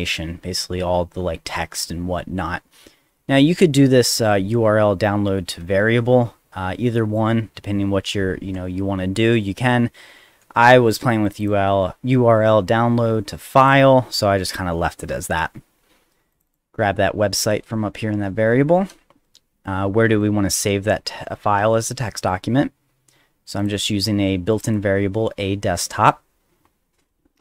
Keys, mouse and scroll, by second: 11.2 click, 11.4 click, 13.6 click, 16.3 click, 16.5 click, 20.2 click, 23.6 click, 24.5 click, 24.7 click.